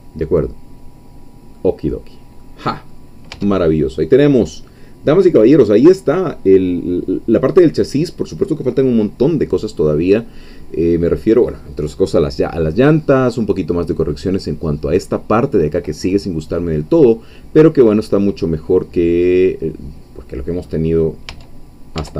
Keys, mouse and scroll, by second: 1.1 scroll down 2, 1.6-3.4 middle drag, 3.4 Tab, 3.9 scroll down 2, 4.8-9.0 middle drag, 9.0-9.5 scroll up 2, 9.5 scroll down 2, 9.9-11.2 middle drag, 12.4-12.8 scroll down 2, 12.9 middle click, 13.7-16.5 scroll up 2, 16.5-17.1 scroll down 2, 17.1-20.9 middle drag, 20.9 scroll up 2, 21.3 Tab, 22.0 Tab.